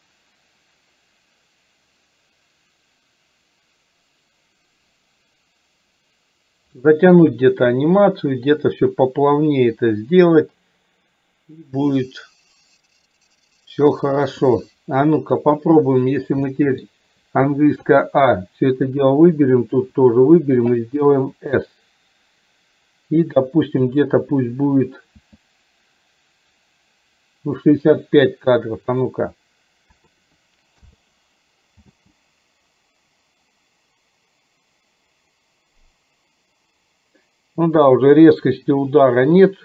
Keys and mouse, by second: 15.2 click, 16.5 middle click, 18.0 a, 19.8 a, 21.5 s, 25.3 s, 29.0-31.0 drag, 31.9 space.